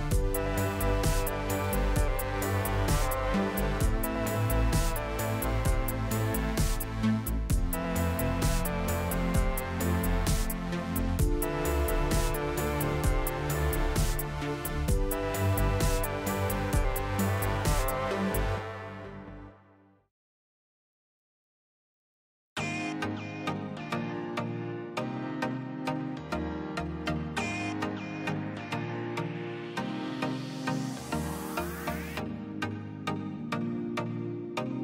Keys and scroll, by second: 0.6 s, 1.2 s, 3.2 Tab, 4.6 Tab, 5.4 KP_Divide, 8.3 2, 16.5 a, 17.2 a, 17.6 u, 23.8 s, 28.5 s, 31.0 Tab, 31.6 Tab.